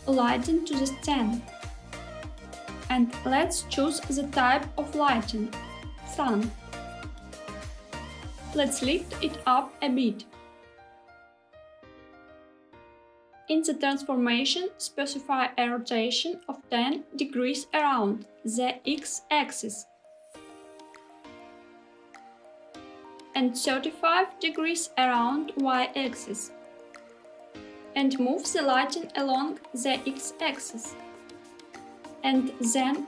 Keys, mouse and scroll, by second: 0.1-2.6 middle drag, 2.8 shift+a, 9.1 g, 9.8 z, 12.6 click, 13.6 click, 18.1-22.3 drag, 23.7-26.7 drag, 27.9 g, 28.8 x, 31.8 click, 32.2 g, 32.7 y.